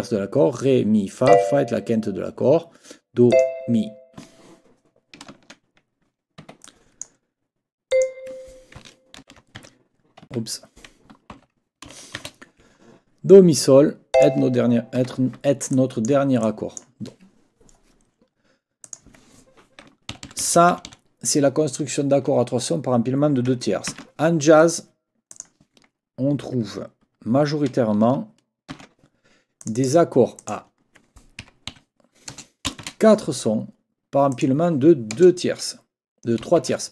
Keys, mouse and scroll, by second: 1.3 click, 3.3 click, 5.3 ctrl+scroll down 2, 6.4 Escape, 6.6 click, 7.9 click, 9.2 ctrl+n, 9.5 ctrl+-, 10.3 Escape, 11.3 n, 14.1 click, 15.0 Escape, 15.7 click, 16.4 click, 18.8 click, 20.1 shift+Right, 20.7 shift+Right, 23.9 ctrl+c, 25.3 click, 28.7 ctrl+v, 29.6 click, 30.4 click, 31.4 Up, 31.7 Right, 32.3 BackSpace, 32.8 shift+', 34.3 click, 35.1 BackSpace.